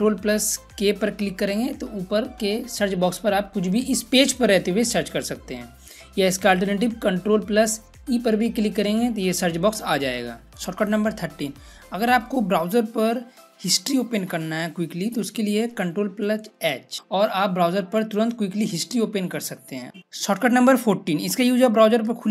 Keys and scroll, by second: 0.7 ctrl+k, 7.8 ctrl+e, 16.4 ctrl+h.